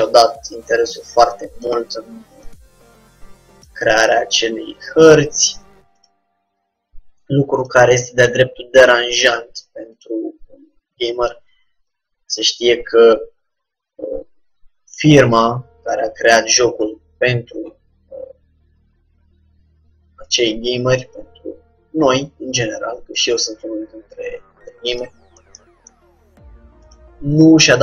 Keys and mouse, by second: 2.5-5.3 drag, 3.9 g, 6.1-7.7 drag, 6.4 g, 8.3-11.7 drag, 8.5 g, 10.4 g, 12.4-15.4 middle drag, 15.4-17.0 drag, 15.7 g, 21.1-22.7 drag, 21.3 g, 23.2-25.0 drag, 23.4 g, 25.7-27.0 middle drag, 27.0-27.8 drag, 27.4 g.